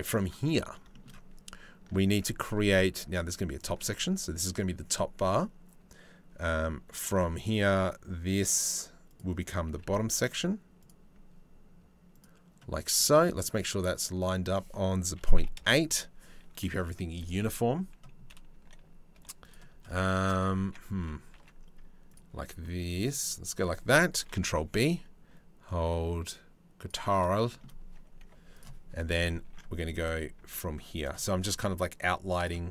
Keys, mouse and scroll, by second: 0.5 shift+right click, 1.7 ctrl+r, 6.7 ctrl+r, 9.3 ctrl+r, 13.8-15.2 drag, 18.1 1, 18.7 2, 19.0 click, 20.9 ctrl+r, 23.8 ctrl+b, 27.8 1, 29.0 ctrl+r.